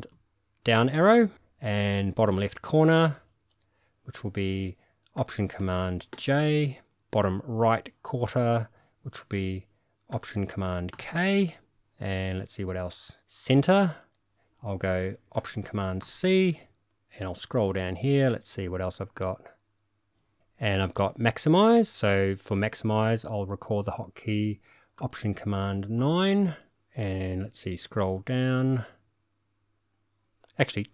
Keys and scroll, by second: 0.1 alt+super+Page_Down, 6.1 alt+super+j, 10.9 alt+super+k, 16.0 alt+super+c, 26.0 alt+super+9.